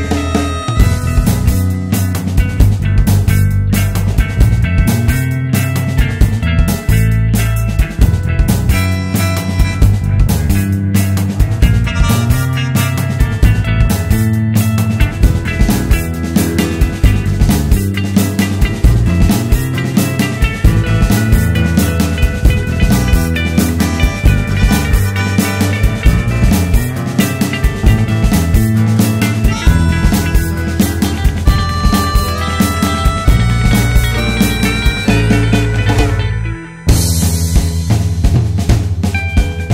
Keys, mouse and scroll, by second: 1.3 alt+s, 4.1 shift+click, 4.4-4.7 scroll down 2, 4.7 `, 6.1 `, 7.9 click, 8.3 `, 9.5 scroll down 2, 9.6 `, 10.0 scroll up 2, 10.1 `, 12.2 click, 13.1 `, 13.8-15.7 drag, 15.7 `, 16.7 scroll up 1, 16.9 `, 17.2 Tab, 17.5 `, 18.3 click, 19.0 `, 19.3-19.6 scroll down 1, 20.2 click, 20.5 shift+click, 21.0 click, 21.3 alt+s, 22.7 click, 22.9 alt+s, 24.4 scroll up 1, 24.9 `, 25.5 click, 25.7 alt+s, 28.3 alt+s, 28.9 click, 29.0 alt+s, 30.7 click, 30.9 alt+s, 32.5 click, 32.8 shift+click, 33.1 alt+s, 34.7 click, 35.0 shift+click, 35.5 g, 36.7 click, 37.3-37.7 scroll down 1, 37.7 Tab, 38.1 scroll down 1, 38.3 `.